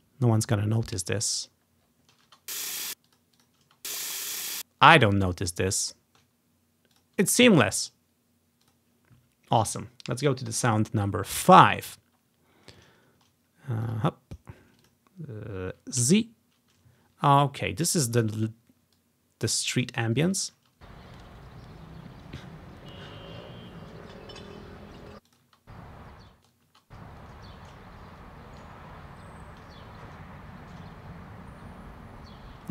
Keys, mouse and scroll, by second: 1.5-1.9 scroll up 1, 1.9 scroll down 1, 2.4 space, 2.9 space, 3.7 space, 4.5 space, 5.2 scroll down 1, 7.0-10.2 drag, 10.6-11.9 drag, 12.0 scroll down 1, 12.4-12.7 scroll up 2, 13.1 ctrl+scroll down 2, 14.0 click, 14.9 click, 16.1 z, 18.2 click, 19.1-21.2 drag, 20.7 space, 25.1 space, 25.4 click, 25.5 space, 25.7 click, 26.2-27.0 scroll up 1, 26.3 ctrl+space, 26.8 ctrl+space, 27.9-28.6 ctrl+scroll up 3, 29.3 ctrl+scroll up 1, 31.0-32.7 ctrl+scroll up 1.